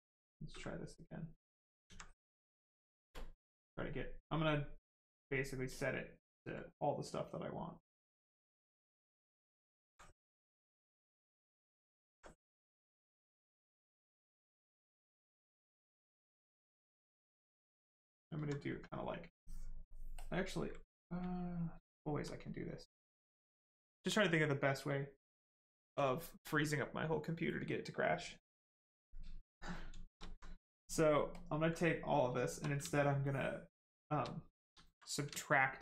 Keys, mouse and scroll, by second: 1.7 alt+click, 1.8 alt+click, 7.9 ctrl+click, 9.6 alt+click, 9.7 alt+click, 16.5 right click, 17.9 shift+right click, 19.3 ctrl+click, 21.1 alt+click, 29.1 right click, 29.8 shift+right click, 30.2 alt+right click, 31.1 ctrl+right click, 31.3 ctrl+click, 31.8 right click, 32.2 shift+right click, 34.5 ctrl+z.